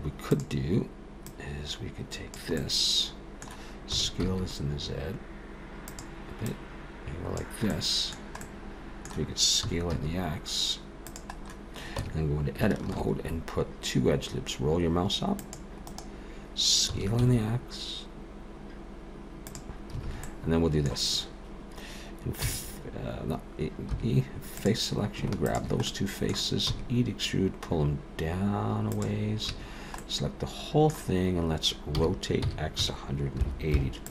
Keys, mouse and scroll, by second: 0.2 click, 1.3 click, 2.6 middle click, 3.9 s, 6.5 click, 7.7 middle click, 8.4 middle click, 9.6 s, 12.0 Tab, 12.9 ctrl+r, 16.9 s, 20.0 alt+a, 20.2 middle click, 22.4 e, 23.9 3, 24.6 click, 25.5 shift+click, 25.9 middle click, 26.7 e, 29.5 a, 30.0 middle click, 32.0 r.